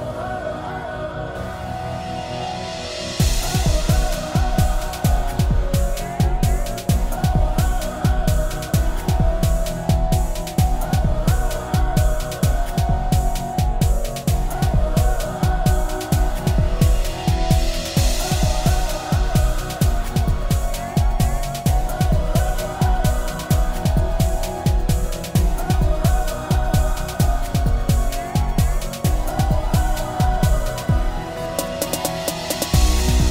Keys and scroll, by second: 0.1 ctrl+space, 24.0 shift+F8, 30.0 shift+F7.